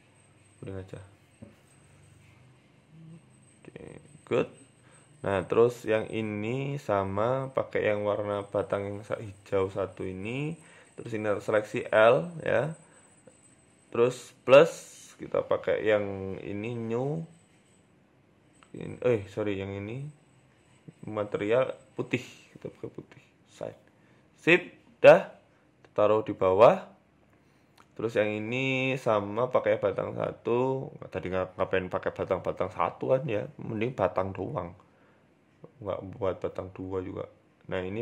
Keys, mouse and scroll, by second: 2.1 s, 3.4 s, 3.5 g, 4.9 scroll down 3, 5.3 shift+middle click, 5.9 right click, 6.5 g, 7.5 click, 8.7 shift+middle click, 9.3 Tab, 10.5-12.1 typing, 12.3 middle click, 13.3 middle click, 14.4 click, 15.0 click, 16.1 click, 17.5 click, 22.1 click, 22.6 click, 22.6 Tab, 23.8 s, 25.6 g, 26.2 KP_0, 27.2 scroll down 4, 27.7 right click, 28.9 click, 29.1 click, 30.1 middle click, 30.5 shift+middle click, 30.8-31.2 scroll down 3, 31.3 Tab, 31.6 middle click, 32.6-34.4 typing, 35.3 click, 36.2 click, 36.7 click, 37.8 click.